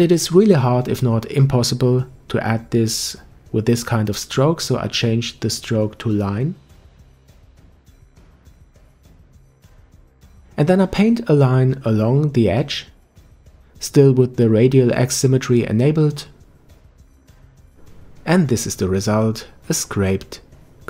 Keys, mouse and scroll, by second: 1.2 ctrl+z, 3.7-6.8 drag, 10.8 f, 14.3-17.5 drag, 20.7-20.8 middle drag.